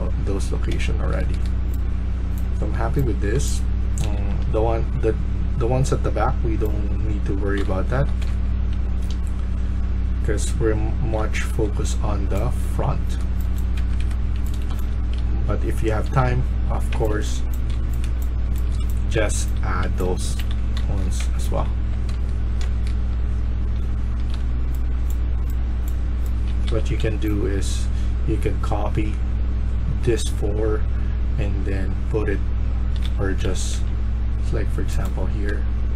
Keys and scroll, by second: 0.0-2.7 typing, 4.0-27.4 typing, 13.7 Escape, 32.6-33.9 typing.